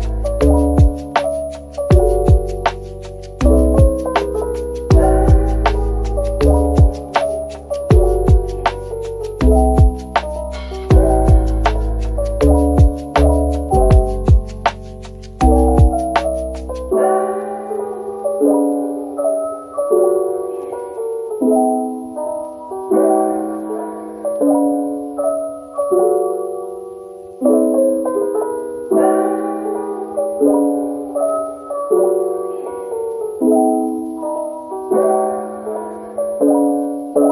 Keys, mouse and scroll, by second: 1.4-1.8 scroll down 1, 1.8 middle click, 2.3 Tab, 3.9 Tab, 4.2-4.9 typing, 5.0 ctrl+b, 9.4-10.3 typing, 12.2 Tab, 12.5 middle click, 16.3 ctrl+z, 16.7 ctrl+z, 17.3 middle click, 19.4 typing, 20.9 Tab, 21.4-22.4 typing, 22.8 middle click, 24.8-25.9 typing, 25.5 double click, 25.9 double click, 26.7 double click, 27.0 middle click, 28.9-29.7 typing, 31.0-31.4 typing, 35.2-36.1 scroll up 1, 36.0-36.9 typing.